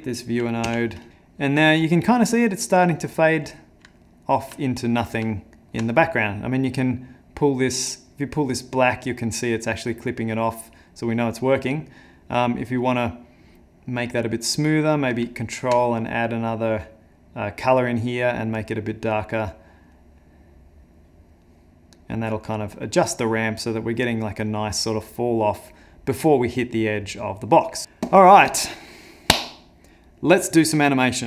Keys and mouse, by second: 0.6 x, 3.5 middle click, 4.0 ctrl+middle click, 4.6 middle click, 5.3 ctrl+middle click, 6.5 click, 11.4 click, 15.4 ctrl+click, 16.8 click, 17.8 click, 18.5 ctrl+click.